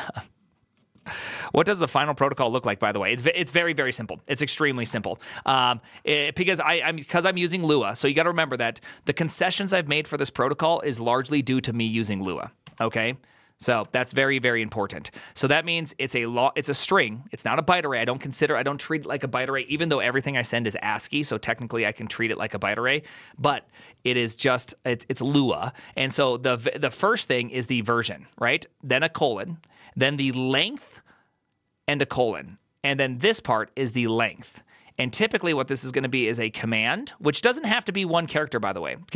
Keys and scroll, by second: 3.5 alt+=, 4.7 ctrl+n, 4.8 Return, 11.2 alt++, 12.6 alt+{, 13.8 alt+=.